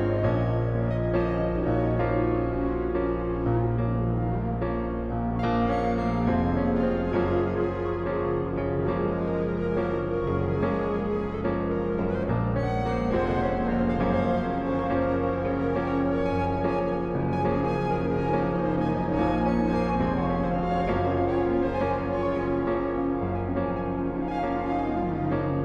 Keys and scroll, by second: 8.6-11.8 typing, 15.0 typing, 17.0-18.2 typing, 20.1-20.8 typing, 24.4-25.4 typing.